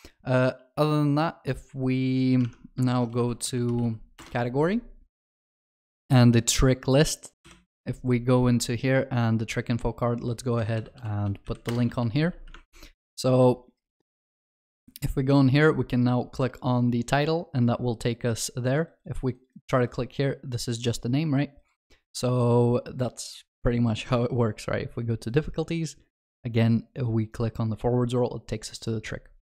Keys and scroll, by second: 2.9 ctrl+shift+n, 7.5 ctrl+b, 11.7 Return.